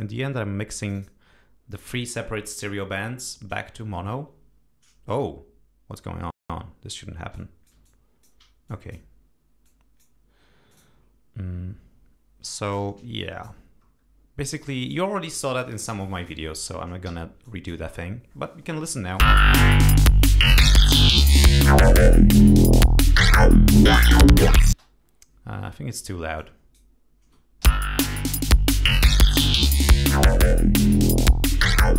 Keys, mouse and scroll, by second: 7.2-8.3 drag, 8.5 alt+click, 9.5 click, 10.6 click, 12.4-15.3 drag, 15.9 click, 17.0 g, 17.3 click, 17.8-18.1 scroll down 2, 18.3 scroll up 2, 18.6 scroll down 2, 19.1 space, 23.5 ctrl+scroll down 2, 24.6 space, 25.0-25.5 scroll up 2, 25.6 scroll down 1, 26.2 click, 27.5 l, 28.2 click.